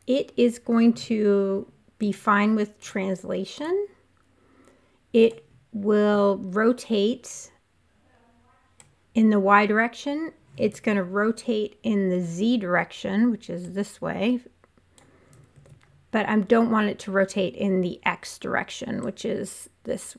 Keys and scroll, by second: 10.6 super+z, 15.5 super+z.